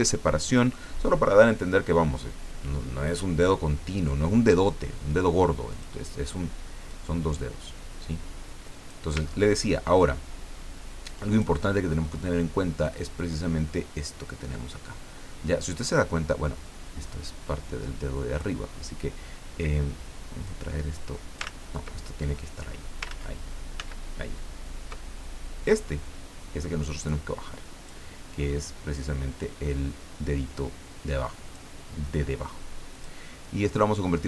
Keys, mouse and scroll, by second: 0.3 ctrl+click, 5.7 click, 6.9-9.1 drag, 9.3-9.8 ctrl+scroll up 2, 11.3 click, 12.8-18.4 drag, 20.4-21.5 drag, 21.4 ctrl+z, 23.1 ctrl+z, 23.7 ctrl+z, 25.6-27.9 drag, 28.9-31.6 drag, 32.9 click.